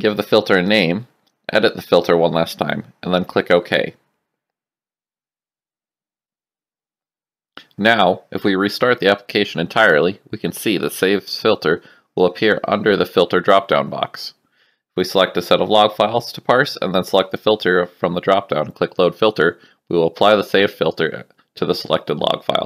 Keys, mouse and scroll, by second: 1.4-5.4 typing, 6.1 click, 7.8 click, 9.5 Up, 9.8 Return, 9.8 KP_Enter, 12.4 click, 13.5 ctrl+a, 14.8 click, 16.6 click.